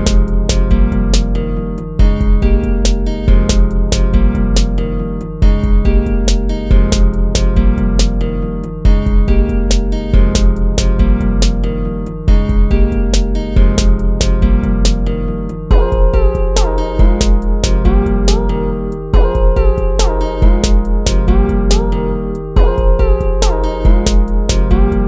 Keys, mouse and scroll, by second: 4.0 ctrl+z, 24.3 ctrl++, 24.5 ctrl+z.